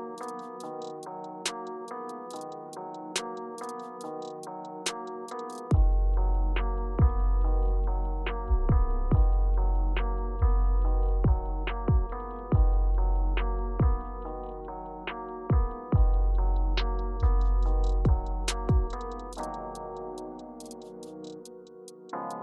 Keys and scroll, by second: 1.4 typing, 2.0 Return, 3.6 Return, 7.6 space, 10.9-11.4 shift+scroll down 1, 13.1 space.